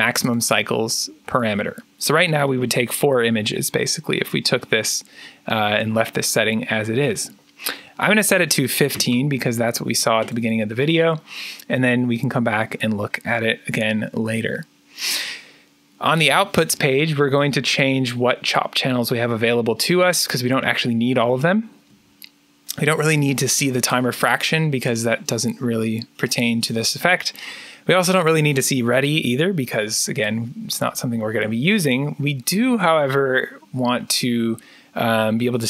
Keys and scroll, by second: 8.6-9.5 typing.